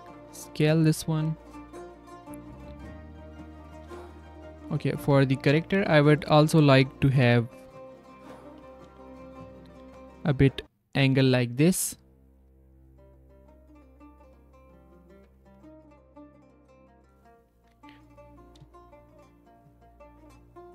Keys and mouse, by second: 0.0 g, 3.6 drag, 3.8 z, 4.6-4.9 drag, 5.0 z, 5.3 click, 5.7 s, 7.1 s, 7.9 z, 9.5 r, 12.4 z, 12.8 s, 15.1 r.